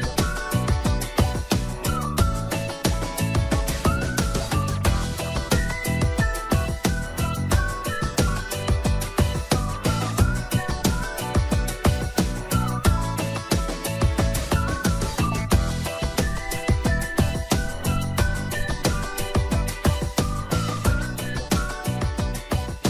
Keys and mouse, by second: 0.3 shift+middle click, 0.8 middle click, 1.3 shift+middle click, 2.2 shift+middle click, 2.4 2, 4.4-7.3 typing, 5.0 click, 7.9 shift+middle click, 8.5 Tab, 9.0 middle click, 9.6 middle click, 10.1 middle click, 10.4 middle click, 10.9 shift+middle click, 11.9 ctrl+s, 12.4 shift+middle click, 14.2 right click, 15.5 shift+middle click, 18.6 shift+middle click, 19.0 middle click, 19.7 Tab, 20.5 middle click, 21.1 middle click, 21.5 middle click.